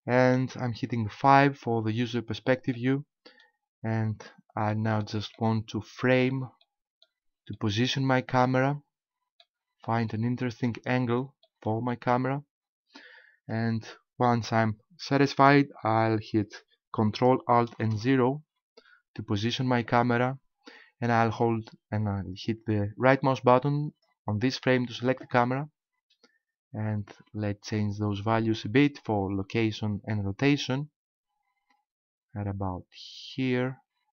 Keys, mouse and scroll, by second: 1.2 KP_5, 2.8 middle click, 4.7 shift+middle click, 5.3 middle click, 7.5 shift+middle click, 8.5 middle click, 10.1 shift+middle click, 10.9-11.5 scroll up 1, 11.5 shift+middle click, 12.1 scroll up 1, 17.7 ctrl+alt+KP_0, 23.9 right click, 27.1 click, 30.8 click.